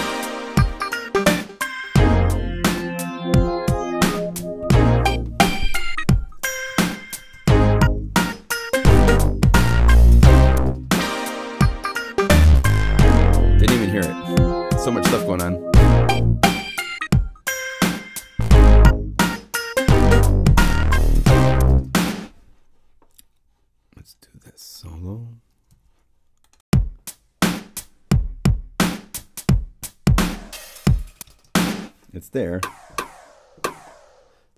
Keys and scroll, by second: 6.5 ctrl+alt+Up, 7.1 ctrl+alt+super+Up, 7.7 ctrl+alt+super+Up, 12.6 ctrl+alt+Up, 13.3 ctrl+Up, 21.6 0, 25.6 s.